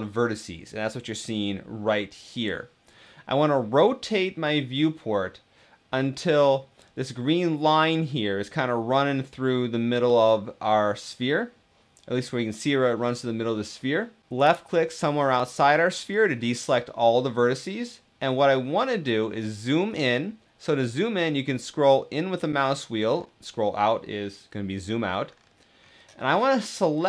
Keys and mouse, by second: 4.6-6.5 middle drag, 14.2 click.